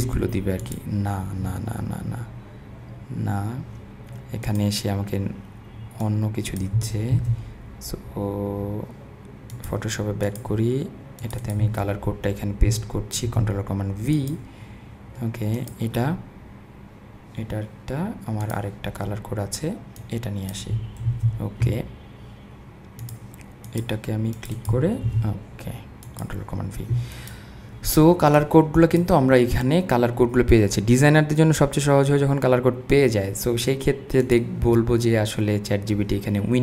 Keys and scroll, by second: 7.1 super+c, 13.3 super+v, 21.1 super+c, 25.1 super+v.